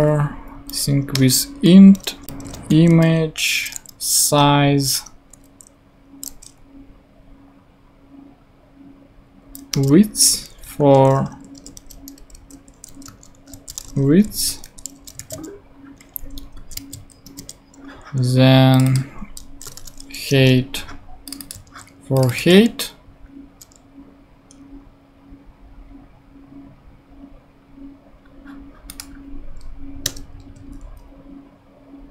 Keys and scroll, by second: 0.5 Down, 1.1 Return, 2.0-3.0 typing, 4.9 Return, 5.3 •, 9.2 Down, 9.7 Return, 10.2 Tab, 10.8-14.3 typing, 14.6 super+;, 15.2 super+d, 16.2 shift+super+d, 16.6 shift+super+Left, 16.7 shift+super+c, 16.9 super+Right, 17.2 Return, 19.4-20.2 typing, 20.3 Return, 21.6 super+c, 22.4 super+v, 30.0 Return.